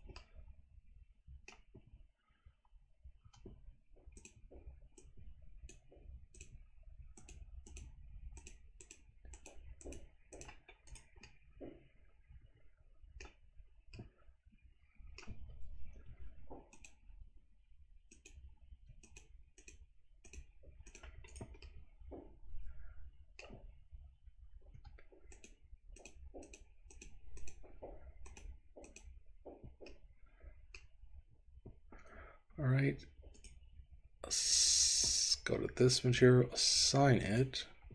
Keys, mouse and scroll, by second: 0.2-1.5 middle drag, 2.1-2.4 scroll up 2, 3.2 c, 5.0 click, 6.5 click, 7.3 click, 7.8 click, 8.4 click, 9.5 click, 10.5 click, 11.0 right click, 11.4-13.4 middle drag, 13.6-14.2 scroll down 3, 14.2-15.2 middle drag, 16.0 c, 18.2 shift+click, 19.1 click, 19.7 click, 20.3 click, 21.0 click, 21.3 right click, 21.8-23.5 middle drag, 26.0 click, 26.0 c, 26.5 click, 27.0 click, 27.5 click, 28.3 click, 28.9 click, 30.0 middle click, 33.3 right click, 35.9 click, 37.3 click.